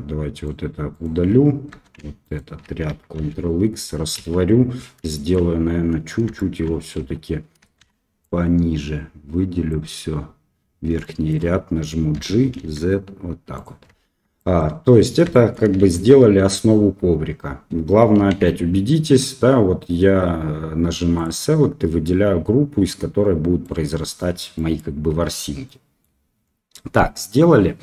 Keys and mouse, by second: 0.3 alt+right click, 0.9 alt+right click, 2.2 alt+right click, 3.3 ctrl+x, 4.1 KP_1, 5.1 shift+middle click, 6.3 shift+middle click, 7.0 1, 7.8 shift+z, 8.2-9.7 drag, 11.0 shift+middle click, 12.1 g, 14.1 Tab, 14.3 middle drag, 15.3 shift+drag, 15.8 shift+z, 16.8 Tab, 18.3 alt+a, 22.0-23.6 middle drag, 24.5 middle click, 25.1 Tab, 25.6-26.0 middle drag.